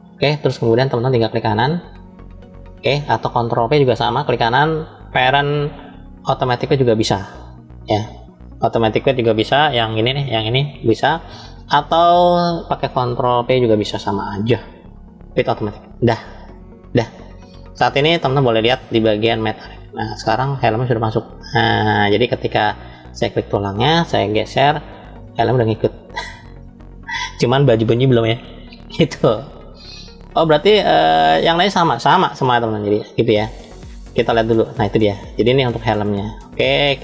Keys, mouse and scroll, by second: 3.9-13.5 right drag, 13.7 ctrl+p, 16.8-18.8 scroll down 2, 18.8-19.7 drag, 18.8-19.6 scroll down 1, 21.4 click, 23.0 click, 24.4 g, 29.5-32.2 right drag, 32.4-33.5 shift+middle drag, 34.3 click.